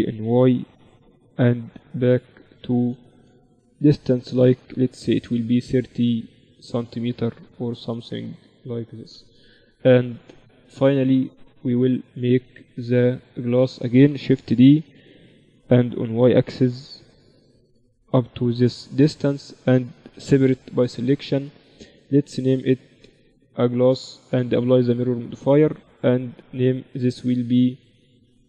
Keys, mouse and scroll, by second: 2.2 KP_7, 3.0 z, 5.6-7.4 drag, 7.4 middle click, 7.7 z, 9.0 KP_1, 9.4 middle click, 9.8 z, 10.0-11.1 drag, 11.6-13.1 middle drag, 13.1 z, 15.2 shift+d, 20.1 p, 20.9 Tab, 21.6 click, 22.2-23.3 right drag, 22.2 z, 23.5-27.4 drag, 26.2 Tab, 27.8-28.4 drag.